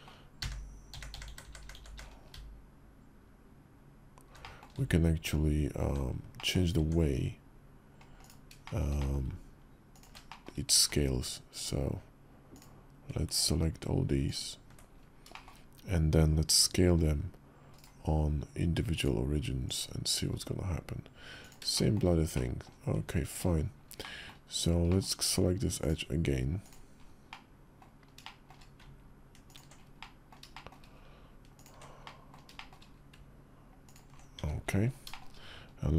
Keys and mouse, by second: 0.2-5.7 typing, 4.2 middle click, 6.1 middle click, 6.5 Tab, 8.4 shift+middle click, 8.7 middle click, 9.7 ctrl+click, 10.0 shift+middle click, 10.5 ctrl+z, 14.0 ctrl+click, 15.1 shift+click, 16.6 s, 18.9 click, 20.0 s, 21.5 shift+middle click, 22.1 middle click, 22.7 Tab, 23.8 middle click, 24.0 click, 24.6 click, 26.4 click, 27.1 middle click, 28.0 shift+middle click, 29.3 ctrl+click, 29.8 middle click, 30.3 shift+click, 31.3 ctrl+click, 31.8 middle click, 32.3 shift+click, 34.8 shift+click.